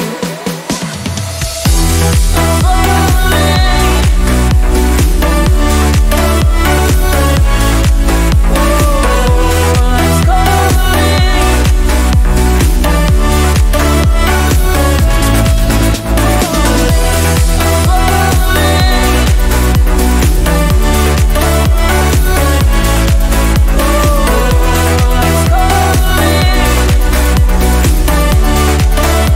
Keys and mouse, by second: 3.9 g, 14.6-22.0 drag, 22.0 g.